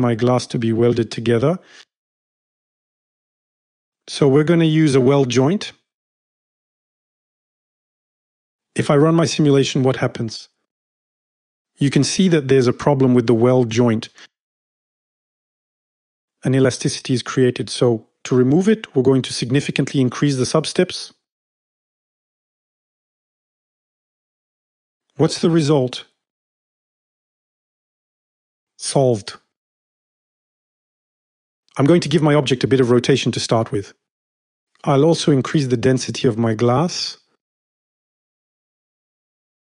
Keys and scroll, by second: 12.0-13.3 typing, 22.5 Return, 32.6 shift+=, 38.9 2, 39.0 Return.